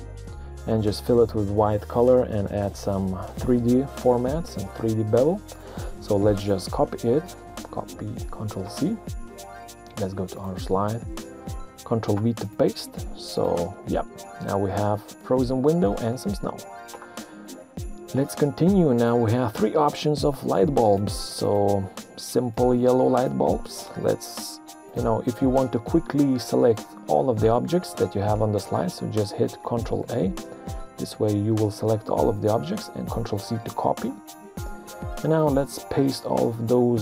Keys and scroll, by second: 7.3 ctrl+c, 11.4 ctrl+v, 13.9 Print, 16.6 Escape, 30.0 ctrl+a, 33.2 ctrl+c, 36.6 ctrl+v.